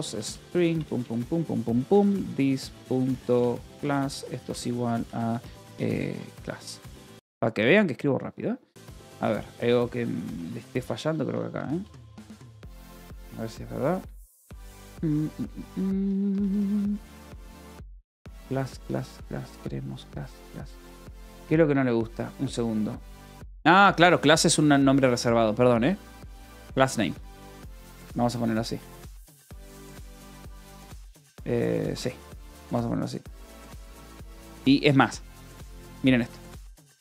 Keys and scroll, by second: 0.0-0.5 typing, 0.8 Return, 1.7-6.9 typing, 8.7-13.6 typing, 12.0 Escape, 14.0 Escape, 14.8 ctrl+s, 15.0-19.3 typing, 20.8 j, 21.1 k, 24.1-33.5 typing, 31.3 Escape, 33.7 Escape, 36.1 Escape, 36.6 u.